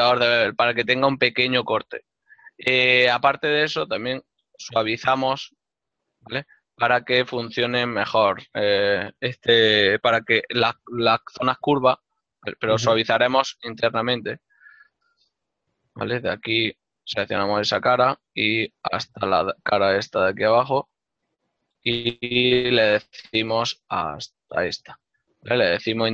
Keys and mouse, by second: 0.4 ctrl+middle click, 3.7 middle click, 4.3 shift+middle click, 4.6 click, 5.4 ctrl+middle click, 12.4 ctrl+z, 13.0 Tab, 14.1 click, 17.2 right click, 19.8 middle click, 24.2 ctrl+right click, 24.8 shift+middle click.